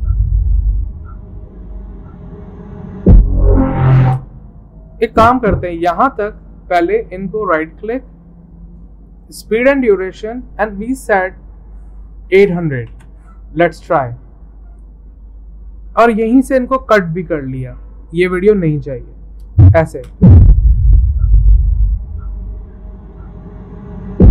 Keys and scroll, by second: 12.1-13.1 typing, 16.0 c, 17.3 v, 18.4 Delete.